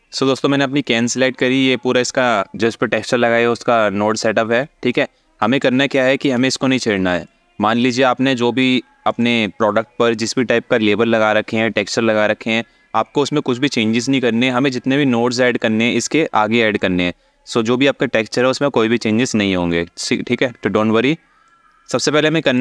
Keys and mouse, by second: 2.0-2.4 alt+shift+middle drag, 5.2 alt+shift+middle click, 6.9 click, 7.1-8.3 drag, 8.7 click, 20.0-20.5 alt+shift+middle drag, 21.1-22.2 drag.